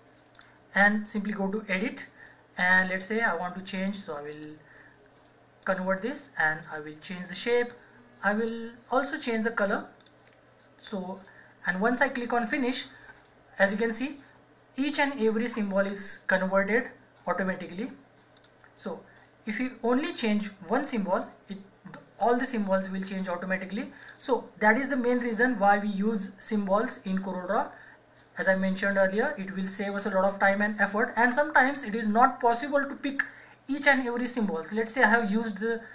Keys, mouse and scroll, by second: 4.3 right click, 5.6-8.4 drag, 12.4 click, 18.4 click, 24.0 click, 29.1 click.